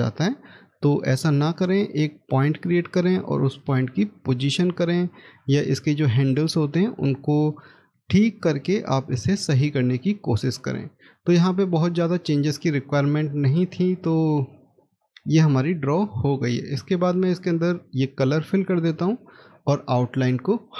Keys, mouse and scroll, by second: 0.1-0.6 scroll down 1, 0.9-3.5 scroll up 1, 3.5 double click, 7.4 middle click, 11.3-13.0 scroll up 1, 14.5-14.9 scroll down 1, 15.5 middle click, 20.4 right click.